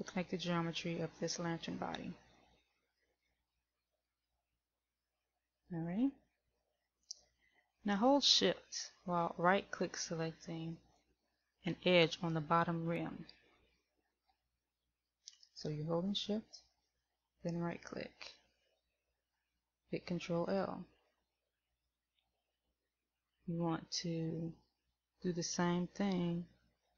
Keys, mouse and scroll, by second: 4.0 ctrl+l, 17.9 shift+right click, 20.7 ctrl+l.